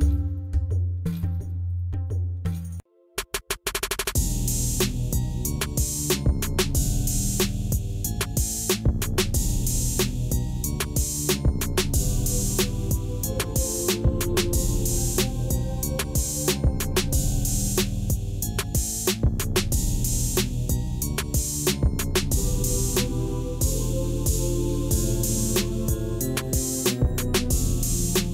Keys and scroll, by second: 0.0 shift+a, 2.9 Tab, 5.0 s, 7.8 Tab, 8.1 g, 11.4 Tab, 14.0 3, 20.6 ctrl+b.